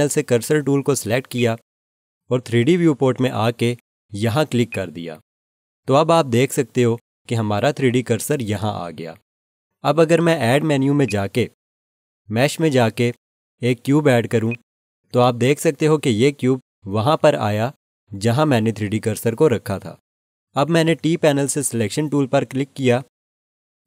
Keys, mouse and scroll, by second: 1.3 click, 4.6 click, 11.0 click, 14.4 click, 22.8 click.